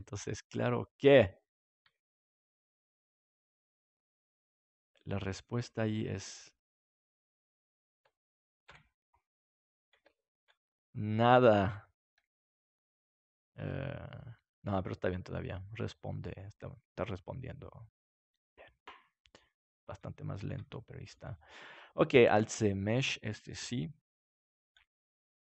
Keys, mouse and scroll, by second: 2.5 r, 6.7-7.8 drag, 8.6 KP_Decimal, 10.0 middle click, 12.9 g, 18.9-19.9 drag, 19.9-23.9 middle drag, 22.2 alt+c.